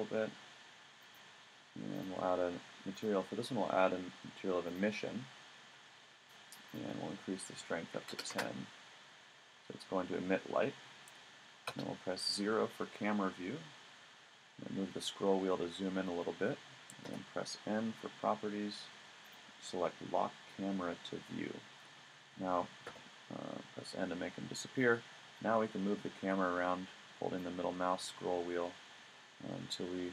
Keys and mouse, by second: 4.7 middle click, 11.7 KP_0, 14.2 middle click, 15.1 middle click, 17.1 n, 22.9 n, 26.3 middle click, 26.5 middle click, 26.6 middle click, 26.7 middle click, 26.9 middle click, 27.4 middle click, 27.7 middle click.